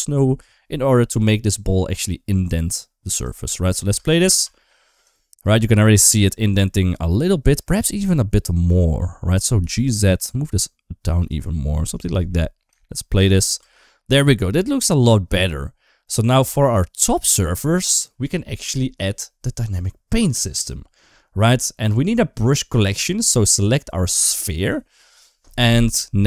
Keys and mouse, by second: 1.1 middle click, 3.8 space, 4.1 space, 4.4 middle click, 5.0 shift+middle click, 5.8 shift+middle click, 6.5 middle click, 7.5 shift+middle click, 7.9 middle click, 9.4 g, 11.8 click, 12.1 middle click, 12.7 shift+middle click, 13.1 space, 13.4 space, 13.7 middle click, 14.1 shift+middle click, 15.9 click, 17.3 shift+middle click, 24.2 click.